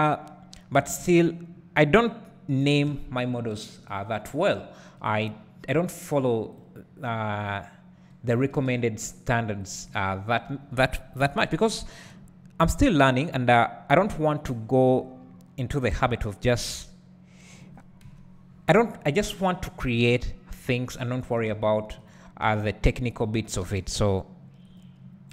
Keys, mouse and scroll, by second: 1.0 a, 2.9 k, 8.6 space, 9.7 click, 11.2 KP_7, 14.7-17.6 drag, 15.3-16.5 scroll up 1, 16.5 g, 18.1 KP_1, 20.2 r, 21.6 g, 22.5 r, 23.2 click, 23.7 r, 24.8 click.